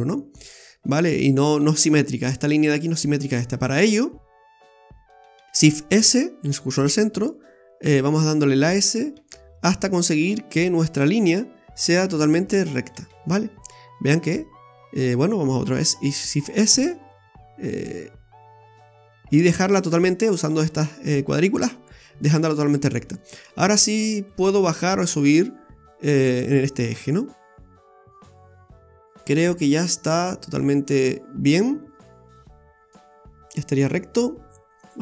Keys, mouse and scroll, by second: 3.6-4.7 scroll down 3, 5.5 shift+s, 7.0 s, 13.2-14.2 scroll up 5, 15.6 shift+s, 16.7 s, 22.1-23.2 scroll down 3, 23.2 middle click, 23.2 scroll down 1, 24.3 click, 27.3-27.8 scroll down 3, 27.6 middle click.